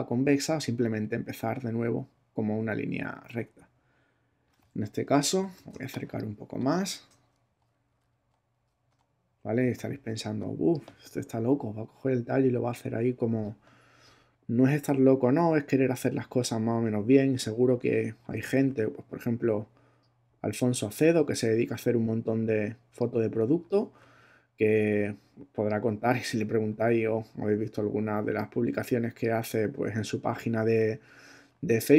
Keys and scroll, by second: 5.7 super+space, 6.6 space, 7.5 Right, 8.0 Up, 8.5 Right, 8.9 Up, 10.1 space.